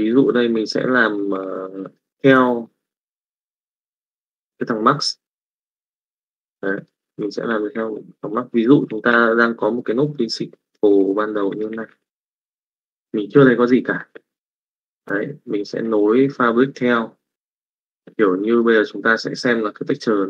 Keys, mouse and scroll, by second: 1.0 click, 1.8 middle click, 2.4 middle click, 3.2 middle click, 6.0 middle click, 6.7 middle click, 8.6 ctrl+click, 9.7 middle click, 10.1 click, 10.4 click, 11.4 click, 12.2 click, 12.2 g.